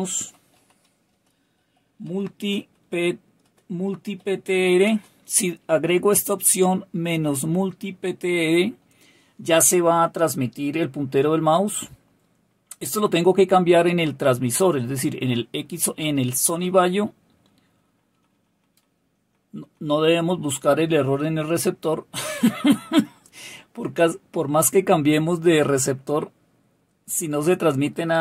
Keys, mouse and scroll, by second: 0.0-4.8 typing, 18.1 Left, 18.3 Left, 18.5 Left, 18.6 Left, 18.8 Left, 19.0 Left, 19.2 Left, 19.3 Left, 19.5 Left, 19.9 Left.